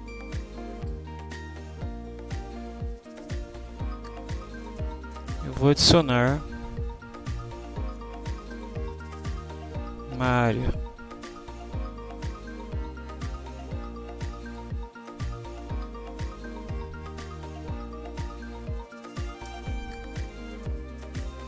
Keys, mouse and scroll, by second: 0.2-1.1 drag, 6.3 click, 8.2-9.1 typing, 10.6 click, 14.5 click, 15.4-17.7 typing, 19.1 Down, 19.5 Up, 19.6 Return.